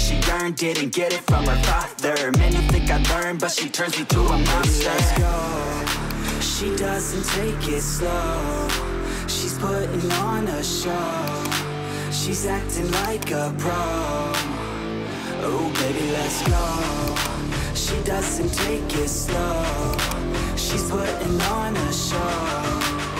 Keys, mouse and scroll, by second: 3.4-4.6 drag, 5.7 click, 7.3 click, 9.7-10.0 scroll down 4, 10.0-10.9 scroll, 11.4 click, 13.1 click, 17.2 click, 20.0 click.